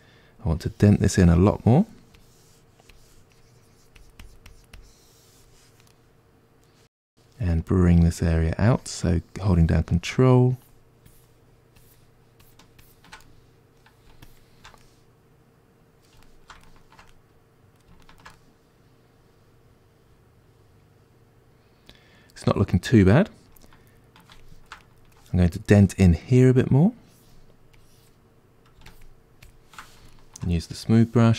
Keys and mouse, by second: 0.5-5.9 drag, 5.9-8.0 middle drag, 8.0-13.2 drag, 13.2-14.3 middle drag, 14.3 shift+click, 14.8-27.0 middle drag, 27.0-30.2 drag, 30.2-31.3 ctrl+middle drag.